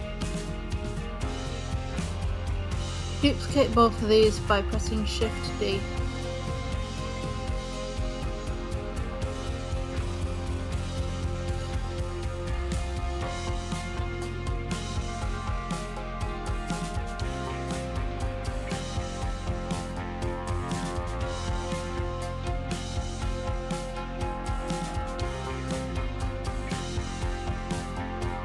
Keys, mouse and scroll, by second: 1.4-3.6 drag, 3.6 shift+d, 8.8 click, 13.5-15.6 drag, 20.5 click, 21.0 click, 22.0-23.8 drag.